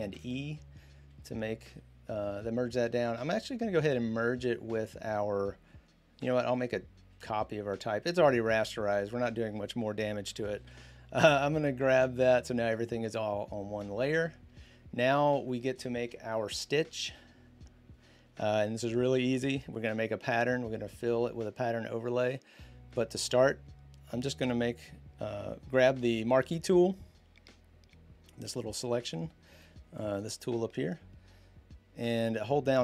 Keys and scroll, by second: 0.0 ctrl+e, 10.4 ctrl+e, 19.3 m.